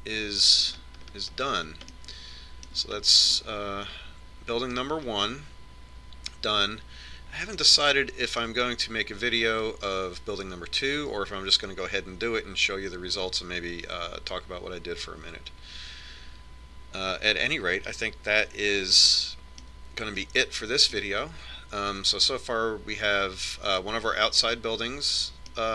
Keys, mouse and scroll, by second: 0.2-1.5 middle drag, 2.2-6.6 middle drag, 8.7-10.5 middle drag, 10.5-11.7 middle drag, 20.2-23.3 middle drag.